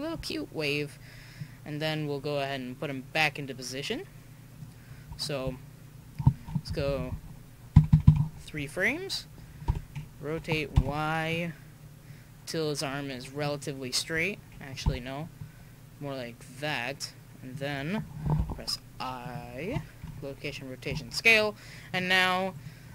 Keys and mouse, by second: 1.4-3.3 drag, 4.9-5.5 middle drag, 6.7-7.1 Left, 7.7 Right, 7.9 Right, 9.7 r, 14.9 r, 21.9 click.